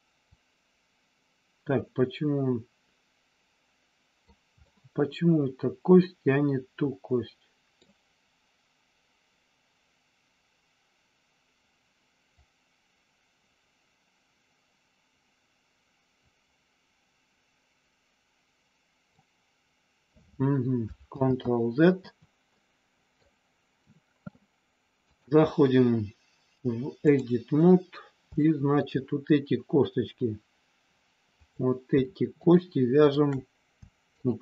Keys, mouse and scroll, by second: 0.3-4.2 drag, 4.6-7.7 middle drag, 12.3-19.1 drag, 21.1 ctrl+z, 22.5 middle click, 25.2-27.2 drag, 28.3 shift+middle click, 31.3 click, 34.0 shift+click.